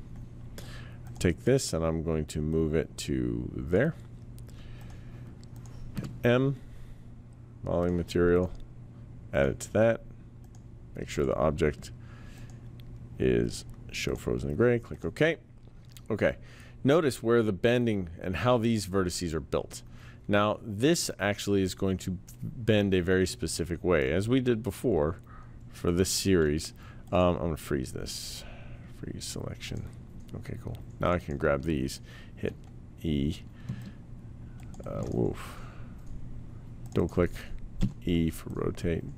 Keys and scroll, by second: 5.9 m, 32.4 e, 37.8 e.